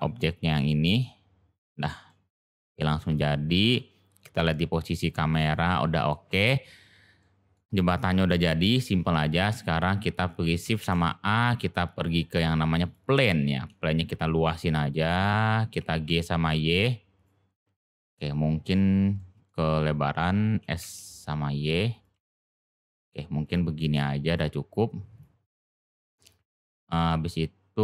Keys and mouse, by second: 1.6 click, 2.1-2.7 middle drag, 2.9-3.7 middle drag, 4.3 click, 7.1-7.5 middle drag, 9.1 click, 10.8 shift+a, 13.6 s, 15.7 g, 17.9 click, 19.1-19.5 middle drag, 22.1 g, 24.2 click, 25.1 click, 26.3 click, 26.8-27.8 middle drag.